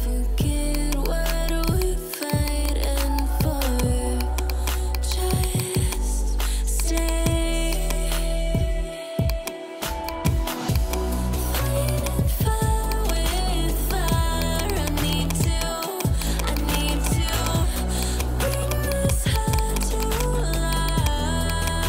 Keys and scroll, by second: 12.1 [.